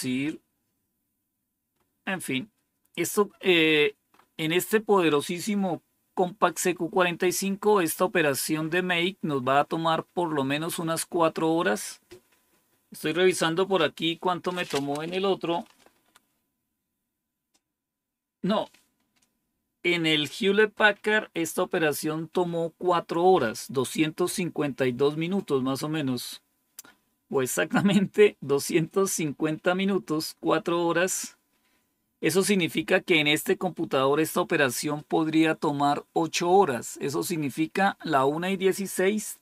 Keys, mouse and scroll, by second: 1.6-2.3 scroll up 2, 2.3-2.9 scroll up 1, 2.9-3.5 scroll up 1, 3.5-4.7 scroll up 2, 7.2 scroll up 2.